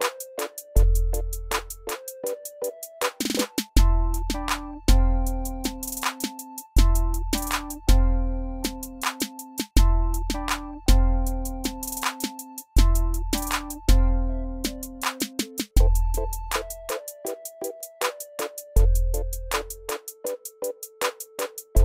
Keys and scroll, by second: 12.2 ctrl+d.